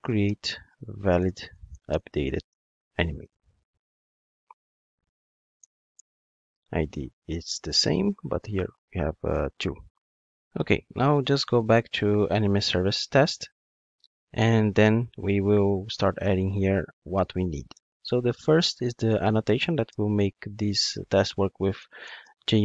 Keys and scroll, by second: 6.0 Return, 20.0 Return.